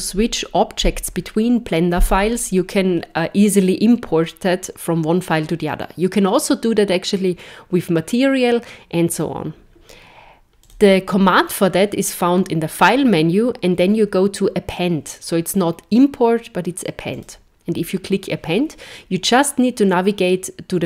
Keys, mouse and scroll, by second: 10.6 click.